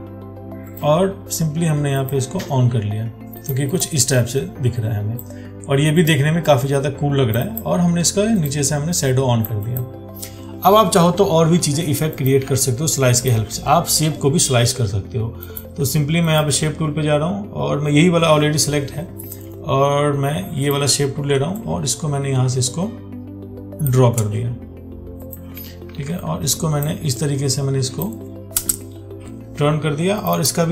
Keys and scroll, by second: 26.1 ctrl+t.